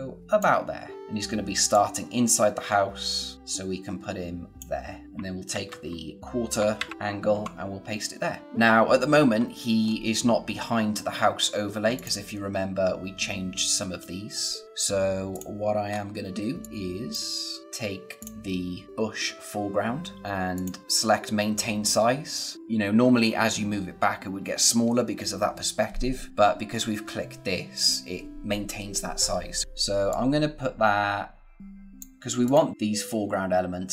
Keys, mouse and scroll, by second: 0.8 scroll down 1, 1.0-1.7 scroll up 1, 1.7 click, 5.5 ctrl+c, 6.2 click, 6.7 ctrl+v, 8.4-9.2 scroll up 1, 9.2-9.7 scroll down 1, 9.7-11.6 scroll up 1, 11.9 click, 14.6-15.3 scroll up 1, 15.3 click, 15.8-16.4 scroll up 1, 16.4 space, 16.6 click, 16.8 space, 17.6 click, 20.5 click, 30.0 click, 32.7-33.7 scroll down 1.